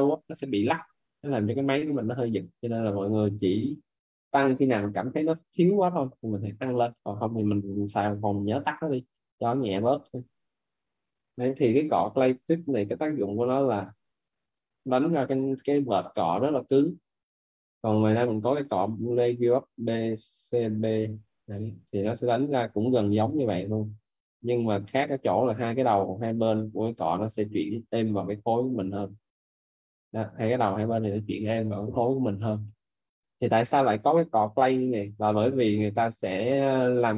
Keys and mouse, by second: 3.8 right click, 4.6 shift+f, 8.4 click, 9.3 click, 12.0 b, 13.0 c, 13.3 t, 13.9 click, 18.0 b, 20.7 click, 24.1 click, 27.0 ctrl+z, 27.3 alt+right click, 28.5 click, 35.7 right click.